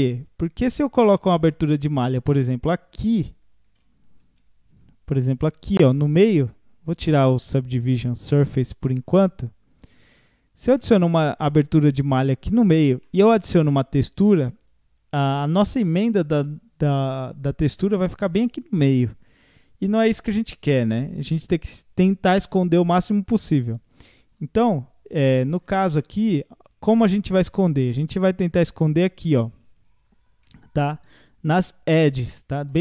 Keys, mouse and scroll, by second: 0.8 scroll up 1, 2.4 3, 2.9-4.2 drag, 4.2 2, 4.7-5.8 drag, 5.9-10.4 middle drag, 10.4 scroll down 1, 12.6 scroll up 1, 13.0-16.0 middle drag, 24.3 click, 24.7-25.0 scroll up 1, 27.8 scroll up 1, 29.1-30.4 alt+drag, 30.4-32.8 middle drag.